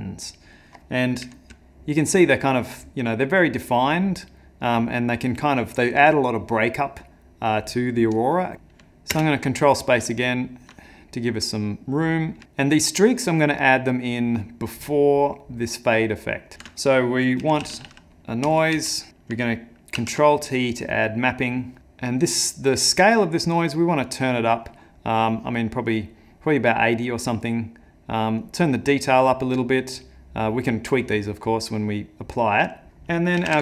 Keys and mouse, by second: 8.5 middle click, 9.1 ctrl+space, 9.7 middle click, 10.2 ctrl+middle click, 10.9 middle click, 12.0 middle click, 12.2 ctrl+middle click, 12.4 middle click, 12.6 ctrl+middle click, 14.1 click, 16.5 ctrl+shift+a, 20.0 ctrl+t, 21.8 click.